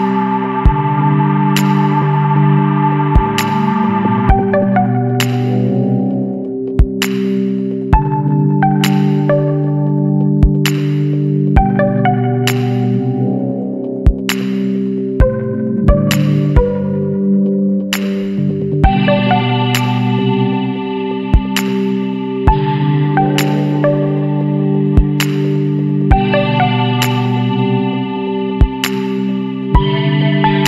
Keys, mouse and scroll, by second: 0.7-3.9 middle drag, 3.9 s, 6.7 KP_Decimal, 7.5-8.5 scroll down 10, 8.5-9.5 middle drag, 9.5 Tab, 9.8-10.9 scroll up 3, 10.0 Tab, 10.9 alt+h, 11.2 middle click, 11.6-11.9 scroll up 1, 12.3-12.6 scroll up 9, 12.6 middle click, 13.2 Tab, 13.5 scroll down 2, 13.7-14.3 middle drag, 14.3-15.0 scroll down 4, 15.0 KP_Decimal, 15.6 scroll up 1, 15.7-16.2 scroll down 12, 16.2 scroll up 1, 16.3-17.3 middle drag, 17.3 scroll up 1, 17.4 Tab, 17.9-18.5 middle drag, 18.5-18.9 scroll up 1, 18.9-20.5 middle drag, 20.5 r, 25.8-26.7 scroll down 3, 26.7 middle click, 27.0-27.3 scroll up 1, 27.3 shift+middle click, 27.5-27.9 scroll up 1, 27.9-28.2 scroll down 2, 28.2-30.6 shift+middle drag.